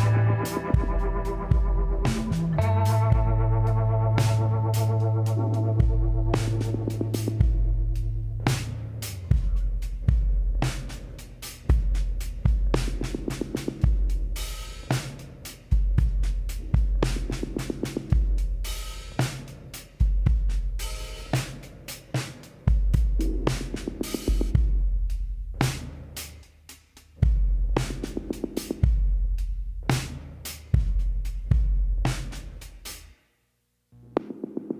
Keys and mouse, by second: 1.6 click, 1.7 middle click, 2.2 click, 2.9-8.1 middle drag, 9.8-13.4 drag, 13.4-15.4 middle drag, 15.4 z, 16.0 z, 16.4 z, 16.8-18.7 drag, 22.6-24.4 drag, 25.6 x, 26.9 z, 28.7-30.9 drag, 31.2 e, 33.6 s.